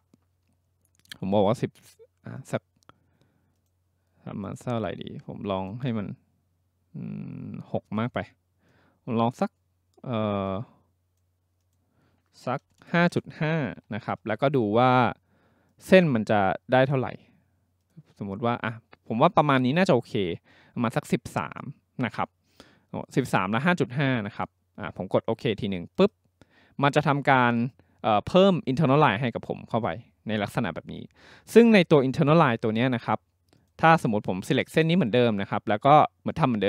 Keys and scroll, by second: 12.6-14.8 typing.